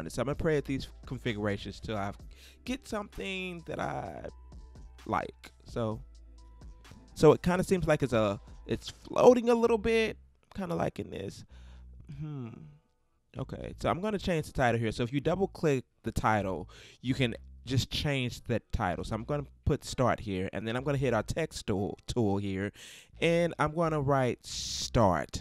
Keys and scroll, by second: 1.9 Up, 16.7-17.9 typing.